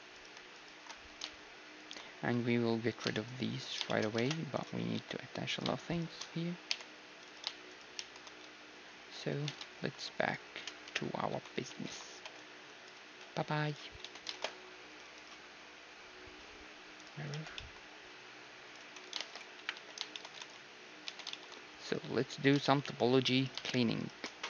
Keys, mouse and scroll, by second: 0.0 s, 0.6-2.4 right drag, 1.1 s, 3.1-6.7 middle drag, 4.2 ctrl+Tab, 5.5-9.7 right drag, 5.5 a, 6.7 j, 8.0 shift+r, 8.7 a, 9.7 ctrl+Tab, 9.7-10.9 middle drag, 10.9-12.1 typing, 13.2 x, 14.0 Tab, 14.3 shift+space, 17.3 t, 17.6-19.6 middle drag, 18.6-20.7 drag, 19.2 shift+space, 19.6 KP_1, 19.7 z, 20.1-23.4 middle drag, 20.4 ctrl+s, 21.1 Tab, 23.4-24.4 right drag.